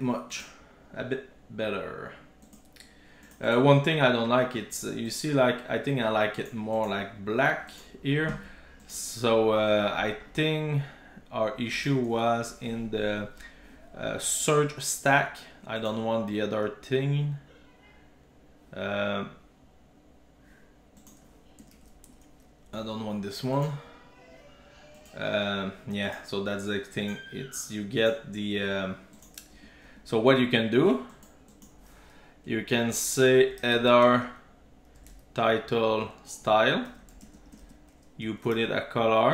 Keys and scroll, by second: 21.6 super+BackSpace, 21.7 super+s, 29.5 super+z, 36.9 Return.